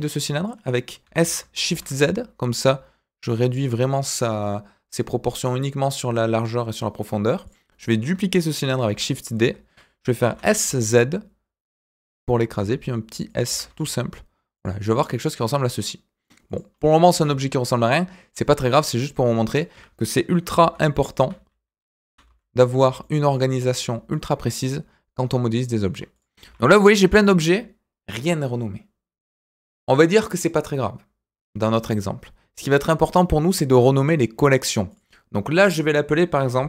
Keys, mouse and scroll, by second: 1.0 s, 3.9 click, 4.3-7.0 middle drag, 7.4 click, 8.9 shift+d, 10.2 s, 12.6 s, 14.8 click, 15.0-16.2 middle drag, 16.4 click, 16.7 middle drag, 17.1 s, 20.5 g, 22.0 s, 23.0-23.3 middle drag, 23.5 click, 23.7-25.8 middle drag, 26.1 click, 26.4 g, 27.1 click, 34.9 click, 35.0-36.6 drag.